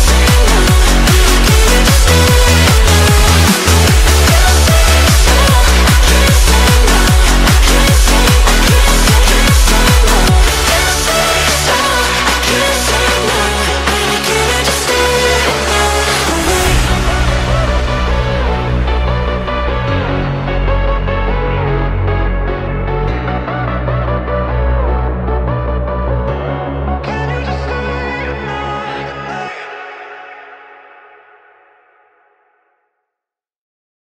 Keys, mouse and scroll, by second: 0.6 shift+d, 0.9 s, 1.8 g, 3.0 middle click, 3.7 r, 7.4 g, 10.6 r, 11.5-12.9 middle drag, 12.9 g, 14.9 middle click, 15.9 g, 16.7-17.9 middle drag, 17.9 click, 18.3-19.3 middle drag, 19.3 shift+d, 20.4 s, 21.3 middle click, 21.8 r, 25.2-25.6 middle drag, 25.6 click, 25.9 scroll down 1, 26.0-27.0 middle drag, 27.0-27.4 scroll up 2, 27.4-27.9 middle drag, 27.9 click, 28.2-29.1 middle drag, 29.1 shift+d, 30.0 middle click, 30.8 g, 31.8 g.